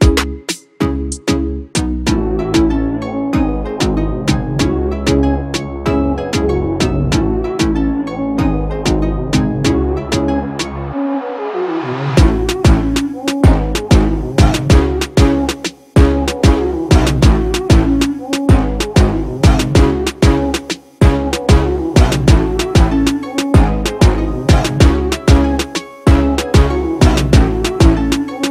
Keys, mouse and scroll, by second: 3.7 ctrl+=, 11.0 ctrl+=, 20.9 ctrl+z, 22.9 alt+shift+click.